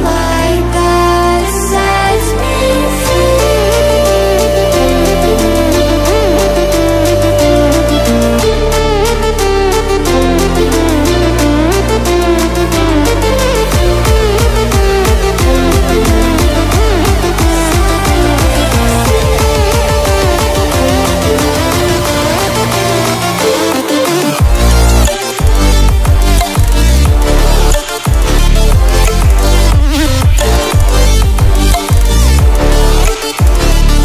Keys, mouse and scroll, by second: 5.3-7.7 drag, 10.7 click, 11.9 ctrl+w, 15.3 click, 18.0 click, 19.3 click, 28.7 ctrl+z, 30.0-34.0 drag.